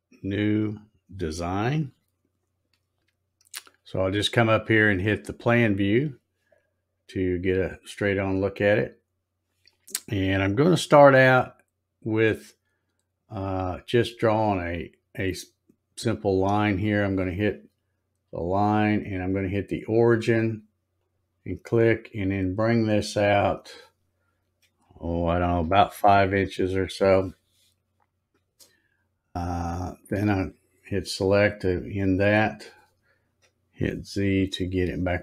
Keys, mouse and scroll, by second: 0.5 click, 5.5 click, 8.4 scroll up 1, 9.0 scroll down 2, 16.4 click, 21.0 click, 24.9 space, 30.3 click, 31.7 scroll up 1, 32.2 scroll up 2, 34.1 z.